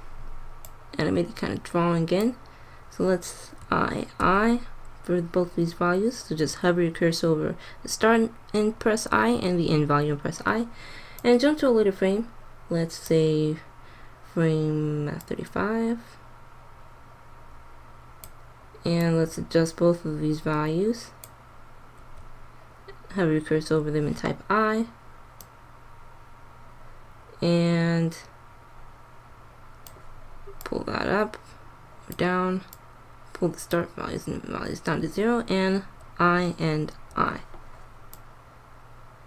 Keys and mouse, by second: 3.7 i, 4.1 i, 11.0-12.8 drag, 15.2-17.0 drag, 19.0-20.8 drag, 22.0 i, 23.4 i, 25.3 click, 30.5-32.4 drag, 32.6-34.5 drag, 35.7 i, 36.3 i, 37.0 i, 38.0-39.2 drag.